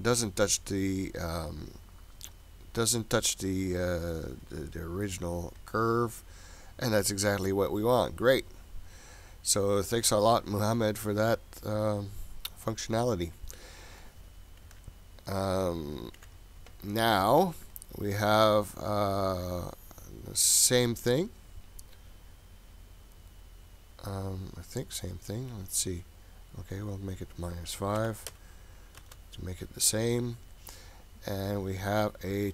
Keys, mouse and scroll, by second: 5.6 click, 6.7 click, 14.0 click, 14.7 Delete, 15.4 click, 16.2 Delete, 17.7 click, 21.1-22.8 scroll down 6, 22.8-24.1 scroll down 2, 24.1 scroll up 3, 24.3-26.7 scroll down 5, 26.7-29.6 drag, 30.0-30.8 scroll down 3, 31.2-32.2 scroll down 4, 32.3-32.5 scroll up 1.